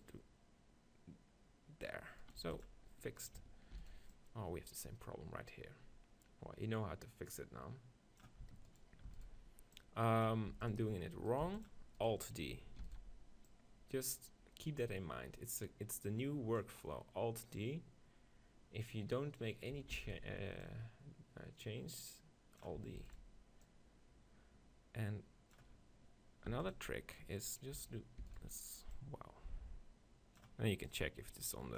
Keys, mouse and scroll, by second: 2.3-4.2 right drag, 2.4 x, 3.8 shift+d, 5.0-6.0 drag, 8.4 shift+Insert, 8.8-10.5 right drag, 9.1 shift+d, 9.8 click, 10.5 x, 11.1 click, 11.5 x, 11.7-13.5 right drag, 12.9 alt+d, 13.8-15.4 drag, 17.6-19.5 drag, 20.0 alt+d, 20.2-22.0 right drag, 20.6-22.5 drag, 23.0 alt+d, 23.2-24.9 right drag, 23.7-25.5 drag, 23.9-25.1 middle drag, 26.5 x, 27.4-29.3 right drag, 28.3 alt+d, 29.0-31.7 drag.